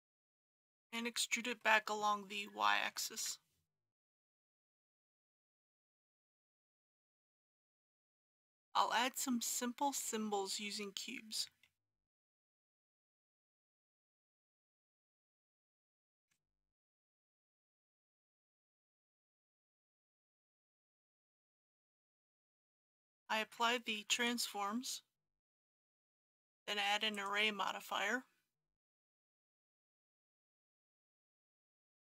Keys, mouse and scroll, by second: 0.2-1.5 middle drag, 1.5-2.8 scroll up 1, 2.8 e, 3.2 y, 7.5 click, 8.1 KP_1, 11.6 shift+a, 13.5 click, 13.9 scroll down 1, 14.0 middle click, 14.3-17.4 typing, 14.5 click, 15.0 click, 15.6 click, 16.4 scroll up 1, 17.3 click, 18.0 click, 18.0 middle click, 18.5 s, 18.6 y, 19.5 click, 19.6 g, 19.7 y, 20.5 middle click, 20.7 scroll up 1, 21.1 KP_1, 23.3 ctrl+a, 24.1 click, 31.2 KP_1, 31.3 KP_Decimal, 31.5 KP_5.